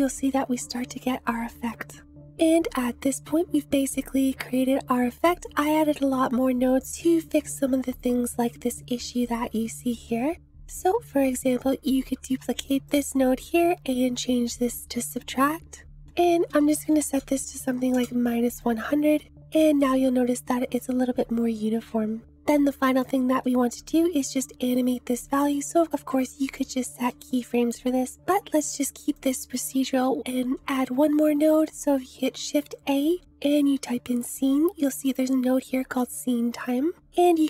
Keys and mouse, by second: 4.1-6.9 drag, 11.3 click, 12.3 shift+d, 12.9 click, 13.5-14.5 drag, 16.0-18.9 drag, 16.9 0, 19.5-22.4 drag, 23.0 click, 26.5 click, 28.2 click, 28.6 Delete, 29.3 click, 31.4 shift+a.